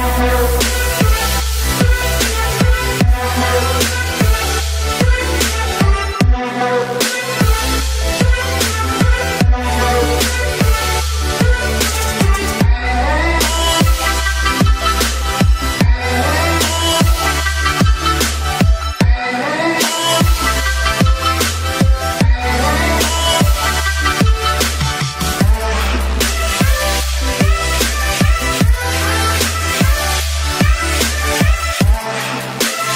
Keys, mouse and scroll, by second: 0.0-0.1 typing, 0.4 click, 3.5-4.2 typing, 4.4 click, 10.0 right click, 10.5 click, 12.9 click, 16.0 click, 22.3 space, 22.7 click, 26.8 click, 28.2-29.3 typing, 31.1 space, 31.5 alt+click, 32.8 space.